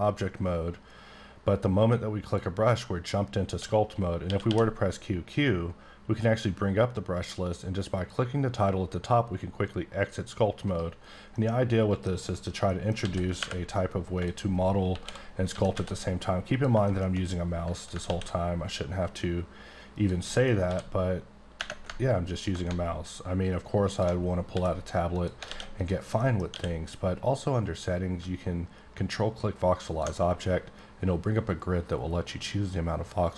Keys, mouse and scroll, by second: 2.3 click, 4.2 q, 4.5 q, 7.9 click, 10.6 right click, 11.3 middle click, 11.5 scroll down 1, 12.7 middle click, 13.0 s, 13.3 y, 14.1 click, 14.9 KP_1, 15.5 s, 15.7 z, 16.5 click, 16.9 shift+middle click, 18.0 ctrl+a, 19.9 click, 20.3 middle click, 20.6 d, 22.4 ctrl+click, 24.5 x, 25.1 click, 25.5 alt+a, 25.8 click, 26.2 middle click, 26.5 q, 29.9 ctrl+click.